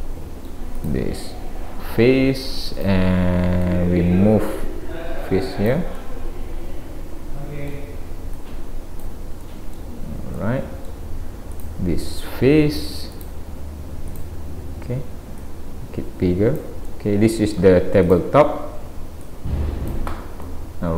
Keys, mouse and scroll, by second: 0.8 click, 2.8 click, 3.6 click, 6.0 middle click, 8.4 click, 9.5 middle click, 11.5 click, 13.2 click, 14.1 click, 15.4 click, 16.9 middle click, 18.1 click, 19.3 click, 20.4 middle click.